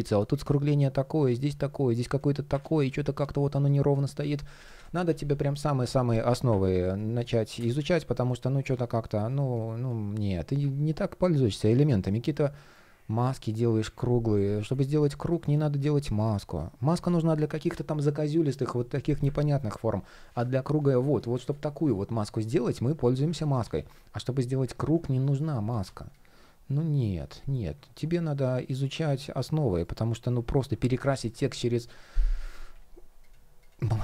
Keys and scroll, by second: 2.2 super+z, 4.0 super+z, 7.4 super+z, 8.7 shift+o, 12.2 shift+o, 14.1 shift+o, 15.6 shift+o, 21.1 shift+p, 23.2 super+z, 24.3 super+z, 25.1 shift+o, 27.0 shift+o, 29.3 shift+o, 31.0 shift+o.